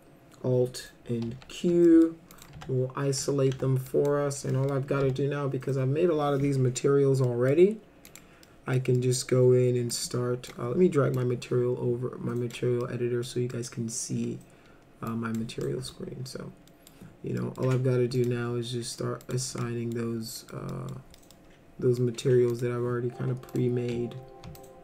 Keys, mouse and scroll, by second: 1.3 alt+q, 1.9 middle drag, 2.3 click, 2.6 F3, 3.2 F3, 3.5 F3, 3.9 drag, 4.5 middle click, 5.0 m, 7.2 middle click, 8.1 click, 8.5 middle click, 9.0 middle click, 9.9 click, 11.2-12.5 drag, 12.8 middle click, 13.5 middle click, 15.1 click, 15.6 middle click, 16.7 middle drag, 17.4 middle click, 17.7 middle click, 18.2 click, 19.2 click, 19.6 middle click, 20.4 middle click, 20.7 middle drag, 21.2 middle click, 22.0 middle drag, 22.5 click, 23.5 click, 24.6 ctrl+click.